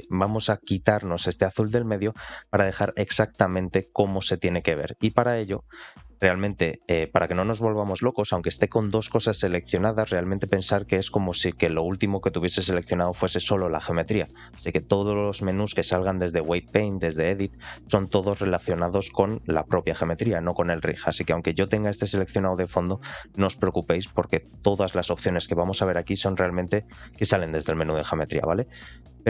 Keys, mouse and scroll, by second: 0.0 shift+middle click, 11.8-12.4 drag, 12.9 click, 15.3-16.0 drag, 17.7-20.0 drag, 21.3 click, 22.8 shift+click, 23.7-24.5 drag, 26.1-27.3 middle drag.